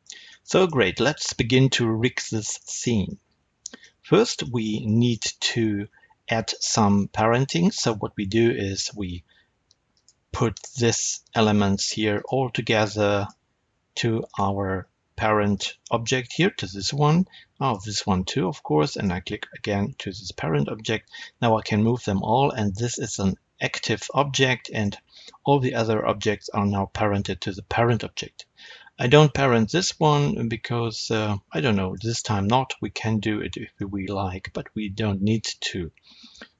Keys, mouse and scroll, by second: 0.0-0.4 scroll down 2, 2.2-9.9 middle drag, 5.8-6.5 scroll up 2, 9.9 click, 12.1 shift+click, 13.1 shift+click, 14.2 shift+click, 15.5 shift+click, 16.0-17.5 shift+middle drag, 17.5 shift+click, 18.8 shift+click, 21.1 g, 21.9 right click, 24.1-36.5 middle drag.